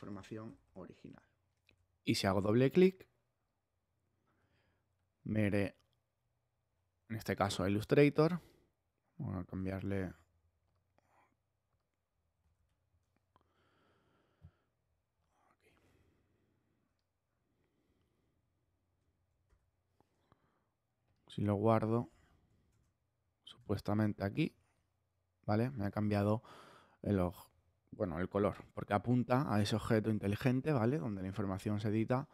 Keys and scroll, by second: 12.5 super+z, 19.4 super+w, 22.7 super+Tab.